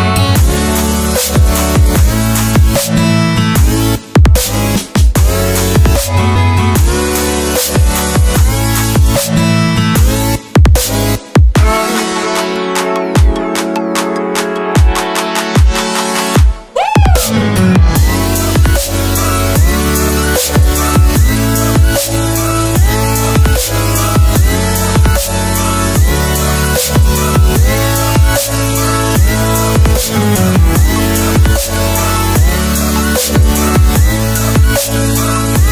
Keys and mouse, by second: 5.2 typing, 5.4 middle click, 8.5-9.0 shift+middle drag, 12.5-13.1 shift+middle drag, 24.1 click, 25.3 x, 26.7-29.3 right drag, 31.4 click.